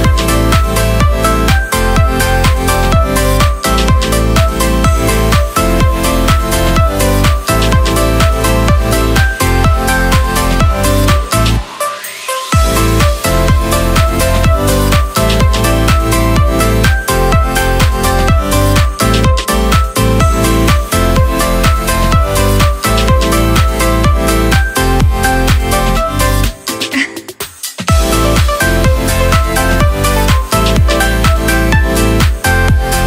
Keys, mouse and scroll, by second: 9.6 alt+middle click, 11.6 space, 11.8 click, 14.2 space, 14.3-14.9 drag, 15.0-15.4 alt+middle drag, 15.4 space, 15.5 click, 19.6 space, 19.7-21.6 drag, 25.5 alt+middle click, 26.4 space, 26.5 click, 30.1-31.2 alt+middle drag, 31.2 space, 31.3-33.0 drag.